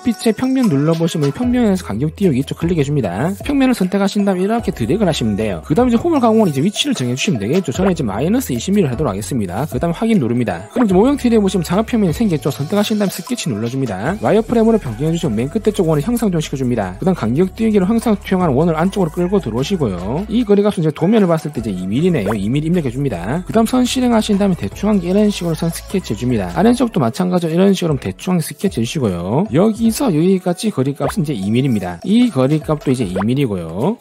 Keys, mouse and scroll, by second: 0.8 click, 3.4-5.7 drag, 10.5 right click, 14.4 alt+w, 14.8 middle click, 14.8-15.7 scroll up 4, 15.2 middle click, 16.5 click, 19.3 click, 20.0 click, 20.7 click, 21.7 click, 22.2 click, 22.8 2, 24.4 1, 25.4 click, 26.4 click, 28.2 click, 29.3 click, 29.5 d, 29.8 click, 30.5 click, 31.0 click, 31.6 2, 32.8 click, 33.1 click, 33.4 2.